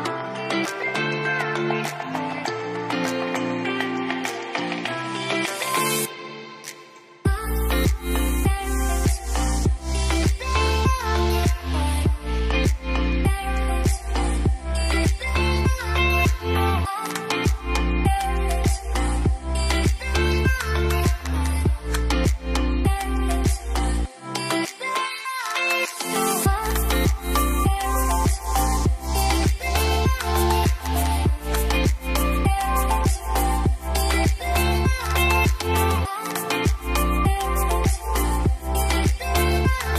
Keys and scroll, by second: 16.7 Return, 16.7 typing, 25.0 typing, 25.2 Return, 28.0-28.8 typing, 36.4 ctrl+s.